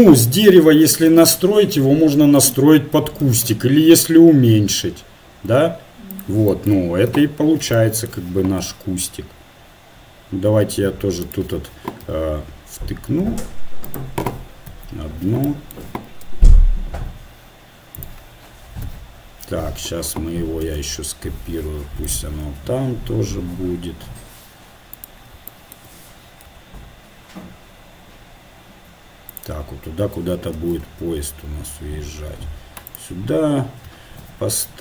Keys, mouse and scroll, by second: 3.3 s, 6.8-8.7 middle drag, 7.0 KP_7, 8.7 g, 12.2 s, 14.7 KP_1, 15.5-17.3 drag, 16.3 r, 18.9 KP_7, 20.7 shift+d, 22.4 s, 25.9 middle click, 26.5 g, 30.6 shift+d, 34.2 KP_1.